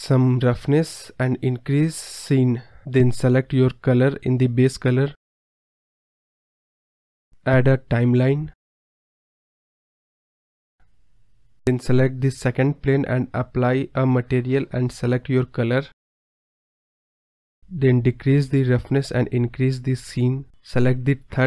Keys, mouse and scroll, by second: 0.5-4.2 drag, 4.6 middle click, 4.6-5.0 scroll down 3, 5.0 scroll up 4, 5.2-7.4 scroll down 4, 7.8 click, 9.6-15.9 drag, 17.3-21.4 drag.